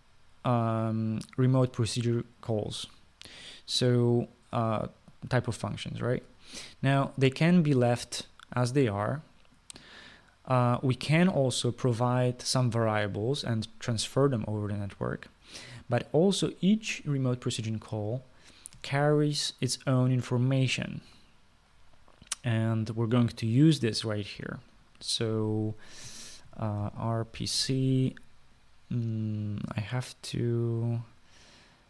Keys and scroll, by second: 27.5-27.8 typing.